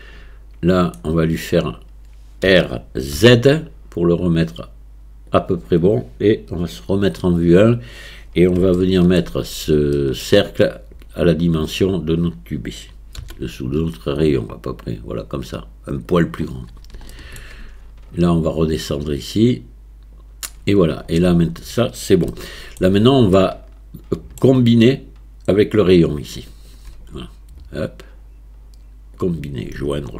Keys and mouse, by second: 2.5 r, 6.9 KP_1, 8.8 shift+middle click, 10.0 shift+middle click, 13.2 s, 17.2 shift+middle click, 17.7 Tab, 18.9-20.2 drag, 22.4-22.8 shift+drag, 23.4-24.4 shift+drag, 26.5 shift+click, 29.0 click.